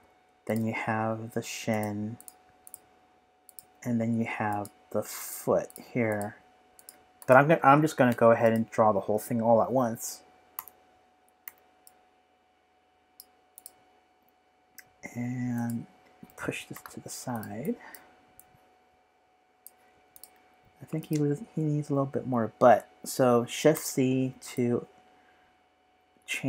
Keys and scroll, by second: 10.5 b, 11.4 v, 23.7 shift+c.